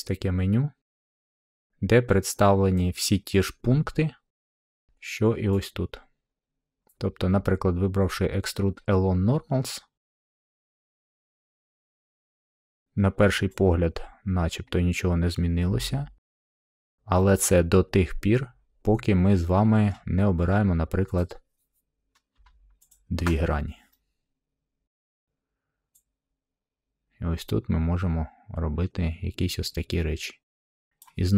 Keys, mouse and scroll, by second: 10.0 click, 12.7-13.7 middle drag, 16.2 click, 16.6 scroll, 19.8-21.0 middle drag, 21.1 click, 22.8 shift+click, 24.8-25.9 middle drag, 30.9-31.3 drag.